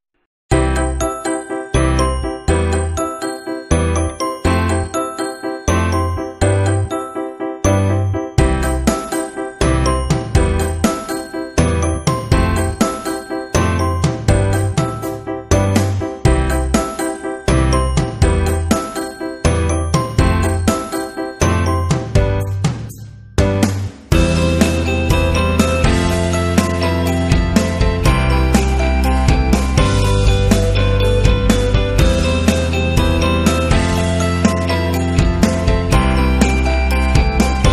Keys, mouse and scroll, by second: 1.4-5.2 typing, 1.4 click, 3.0 click, 4.4 click, 7.8 click, 11.8 click, 12.9 space, 13.2-18.3 drag, 20.4 click, 21.3 click, 24.3 alt+shift+click, 28.6-29.3 typing, 29.5 Right, 30.4 Right, 31.6 Down, 32.5 Down, 33.1 Right, 33.5 Right, 35.8 Down, 36.9 Down, 37.6 Down.